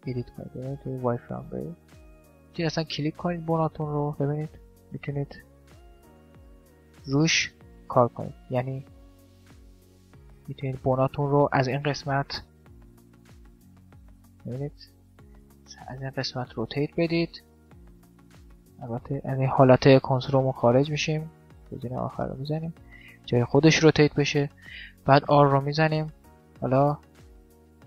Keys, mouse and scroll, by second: 0.0 z, 1.5 middle click, 2.4-3.5 drag, 3.5 right click, 5.1-6.7 middle drag, 6.7 right click, 8.3 middle click, 8.6 click, 9.3 right click, 9.5 middle click, 10.9 right click, 12.1 r, 12.5 click, 12.5 middle click, 12.5 right click, 12.7 middle click, 14.7 right click, 15.1-16.3 drag, 16.0 r, 16.7 middle click, 19.7-21.7 drag, 22.4 r, 24.7 r, 26.1-27.8 middle drag, 26.7 r.